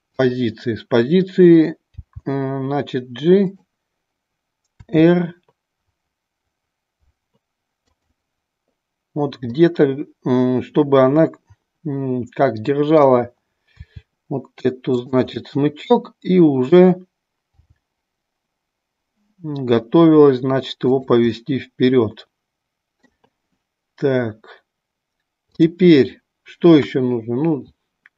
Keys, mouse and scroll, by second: 0.1 click, 7.9 click, 9.6-13.0 middle drag, 15.3-16.8 middle drag, 15.3 r, 20.9 click, 21.4 middle drag, 21.8-23.0 middle drag, 25.5-26.1 drag.